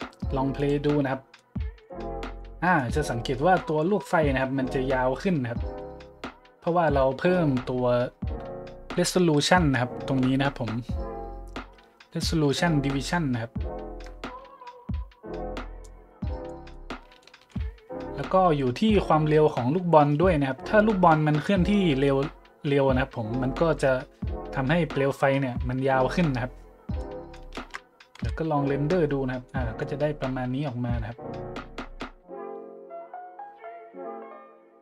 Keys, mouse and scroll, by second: 0.5-0.9 drag, 1.3-1.8 middle drag, 2.3 middle click, 3.0 middle click, 3.3-3.7 middle drag, 3.8 middle click, 5.7-6.1 middle drag, 7.4 middle click, 7.6 middle click, 8.1 middle click, 8.7 middle click, 9.1 middle click, 15.8 click, 16.7-17.1 middle drag, 17.2-17.5 shift+middle drag, 27.0-27.3 middle drag, 27.5 shift+z, 28.1 n, 29.5-29.8 middle drag.